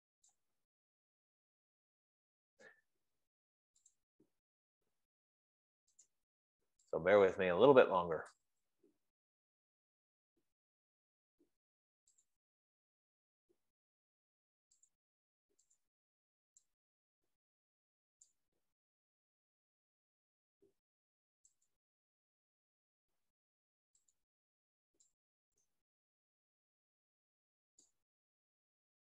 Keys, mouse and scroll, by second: 8.6 click, 9.2 5, 12.5 click, 15.5 click, 16.3 shift+click, 22.9 click, 28.5 click.